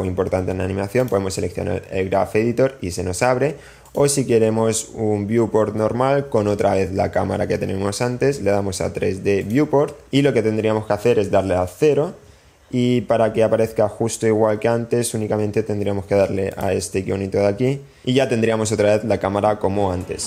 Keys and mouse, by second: 4.7-9.6 drag, 12.2 KP_0, 16.6 click, 18.0 click.